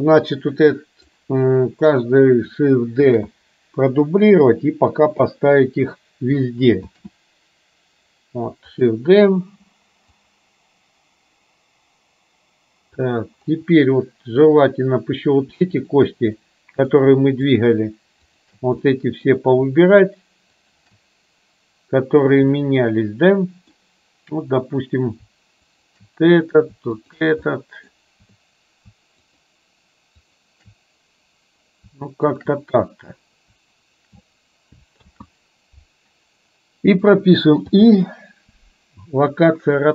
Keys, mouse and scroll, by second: 0.7-1.2 drag, 3.1 shift+d, 7.0 shift+d, 10.2-13.1 drag, 14.5 click, 16.5-17.0 middle drag, 17.6 shift+click, 18.4 shift+click, 19.0 middle click, 22.6-23.7 middle drag, 25.7 shift+click, 27.0 shift+click, 27.6-28.0 middle drag, 29.4 shift+click, 30.4 shift+click, 32.4 shift+click, 35.1 ctrl+z, 37.7 i.